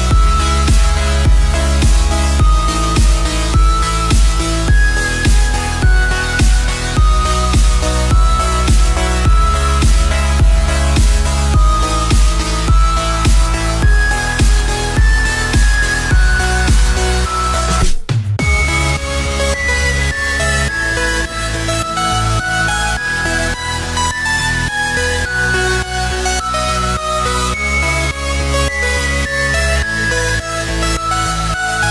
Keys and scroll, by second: 0.6 x, 1.4 space, 3.9 ctrl+z, 5.0 F5, 8.1 ctrl+z, 10.4 ctrl+z, 12.0 ctrl+z, 18.5 space, 19.3 space, 20.3 ctrl+z, 25.3 ctrl+z, 25.7 space.